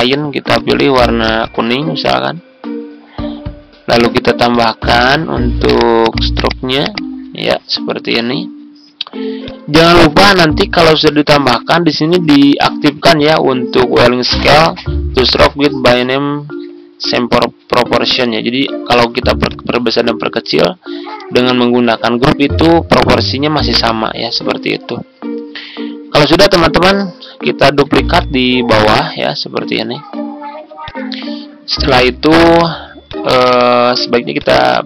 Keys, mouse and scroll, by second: 20.2 ctrl+click, 22.3 ctrl+z, 26.2 click, 27.5 ctrl+d, 28.1-30.2 drag, 30.7 shift+click, 31.9-34.2 drag.